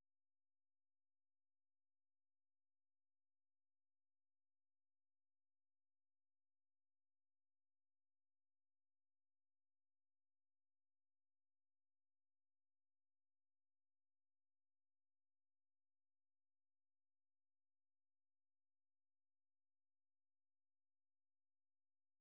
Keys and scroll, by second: 1.3 ctrl+c, 5.5 super+1, 6.8-8.2 typing, 8.8 ctrl+v, 9.4-10.6 typing, 10.6 ctrl+[, 12.0-12.7 typing, 13.7 super+2, 14.2-17.9 typing, 19.1 typing.